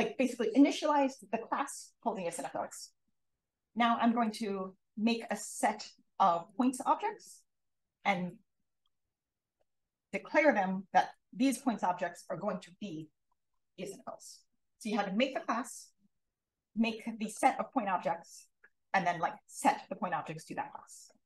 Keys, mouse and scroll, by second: 5.1 click, 11.0 click.